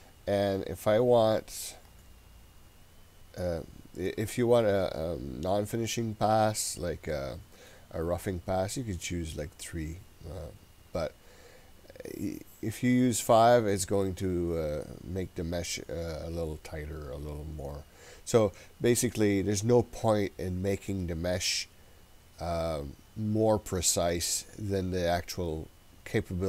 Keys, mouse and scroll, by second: 1.3-3.9 drag.